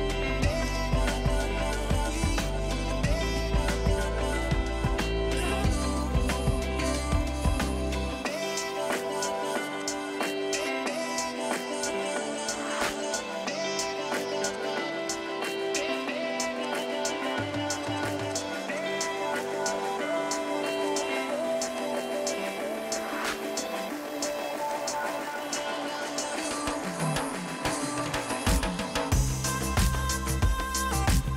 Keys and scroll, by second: 1.6 Delete, 2.4 Escape, 16.3 Escape, 19.3 ctrl+c, 19.6 Escape, 20.7 p, 21.8 space, 22.6 p, 23.2 Escape, 29.8 ctrl+g.